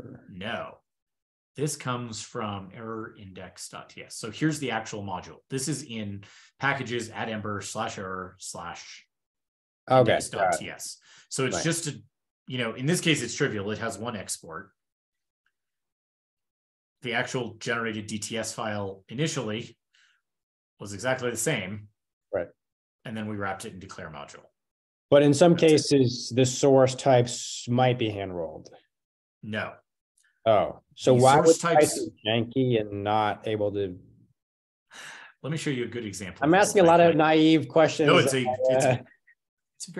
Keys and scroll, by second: 0.5 ctrl+n, 0.7 ctrl+n, 6.8 shift+super+\, 22.6 super+Left, 22.9 shift+super+Down, 27.8 super+w, 36.2 super+k, 36.2 super+w.